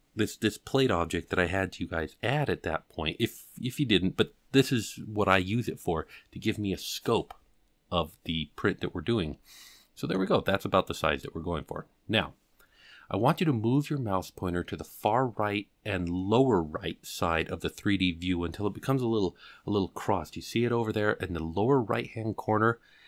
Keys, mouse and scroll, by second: 9.3-9.7 scroll up 2, 9.7-10.1 middle drag.